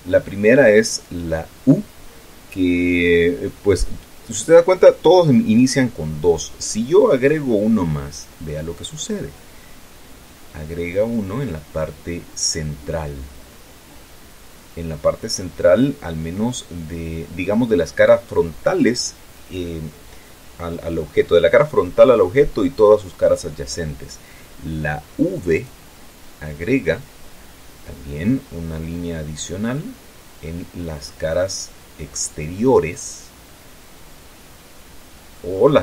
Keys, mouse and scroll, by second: 8.5 click, 25.9 click, 31.9-35.8 middle drag.